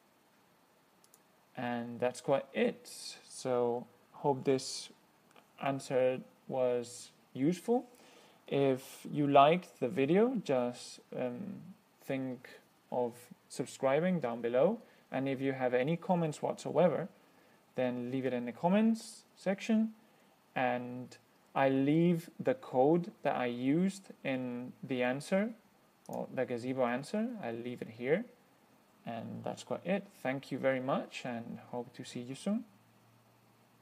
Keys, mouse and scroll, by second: 1.3 click, 26.3 click, 26.6-33.8 middle drag.